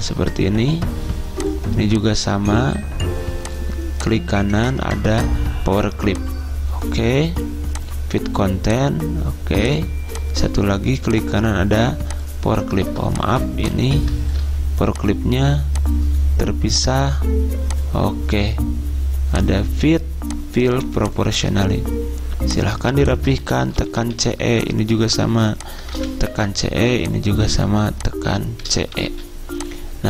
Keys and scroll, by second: 12.9 ctrl+z, 23.7-24.1 typing, 26.1-26.4 typing, 28.8-29.2 typing.